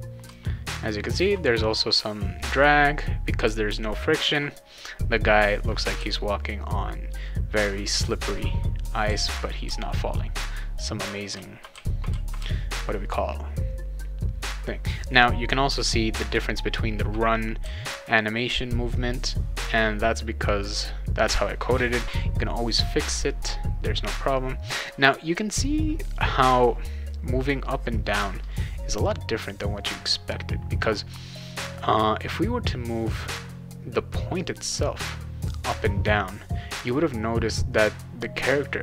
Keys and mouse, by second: 0.2 shift+s, 3.4 shift+w, 5.4 shift+s, 5.9 shift+w, 9.0 shift+s, 9.6 shift+w, 11.1-12.9 typing, 16.1 shift+w, 17.6 shift+w.